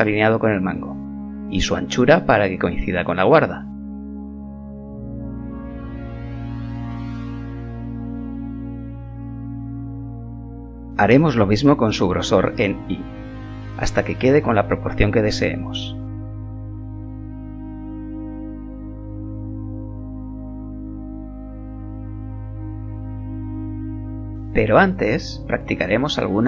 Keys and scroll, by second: 0.2 s, 5.0 g, 11.6 s, 20.1 KP_1.